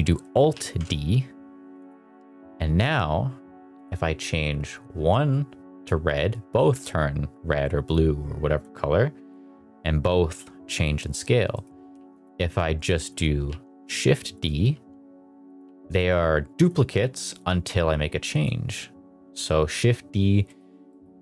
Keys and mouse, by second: 0.5 alt+d, 1.7 click, 1.9 r, 2.8 drag, 9.3-11.1 drag, 11.4 middle click, 11.8 x, 13.4 shift+d, 14.2 click, 14.6 r, 15.4 click, 15.5 g, 16.5 click, 20.4 middle click, 20.8 middle click.